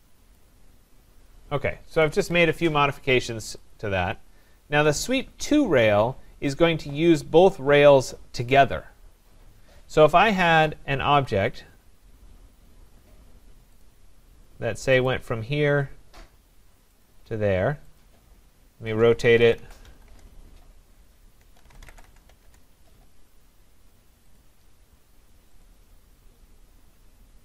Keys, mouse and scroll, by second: 0.4 click, 1.8 Escape, 2.1 Escape, 2.2 Escape, 3.5 click, 3.7 click, 4.3 middle click, 4.4 middle click, 4.5 middle click, 6.5 right click, 8.1 middle click, 8.1 middle click, 8.2 middle click, 8.3 scroll, 10.2-11.3 scroll, 11.3 scroll, 13.8 click, 15.1 click, 17.0 click, 18.0 click, 18.7-22.8 typing, 24.4 click, 25.6 click.